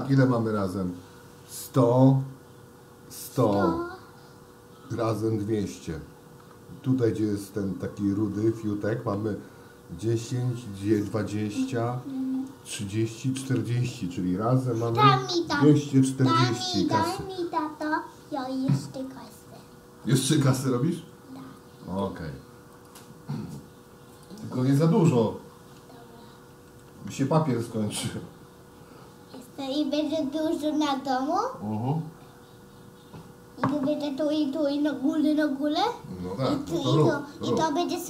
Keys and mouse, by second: 19.4 shift+d, 24.2 click, 26.9 d.